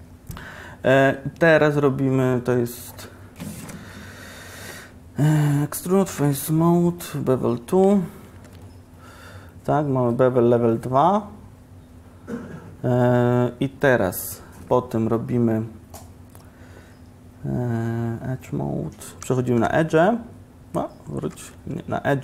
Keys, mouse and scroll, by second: 8.4 ctrl+b, 14.3-19.7 drag, 19.7 1, 21.4 ctrl+z.